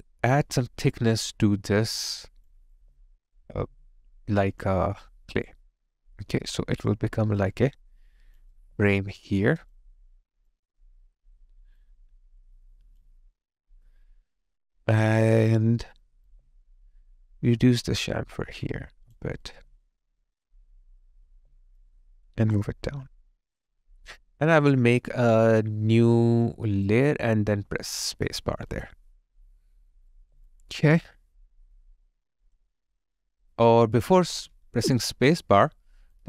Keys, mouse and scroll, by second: 2.8 alt+click, 8.6 alt+right click, 9.8 alt+click, 10.7 alt+right click, 11.8 alt+click, 16.3 alt+click, 28.1 space, 30.2 alt+right click, 30.5 alt+click, 32.9 alt+right click, 34.6 ctrl+z.